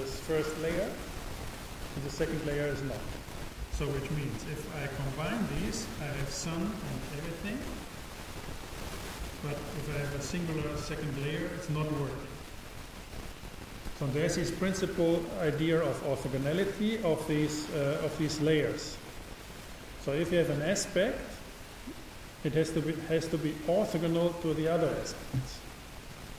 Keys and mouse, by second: 5.3-7.1 drag, 9.6-11.5 drag.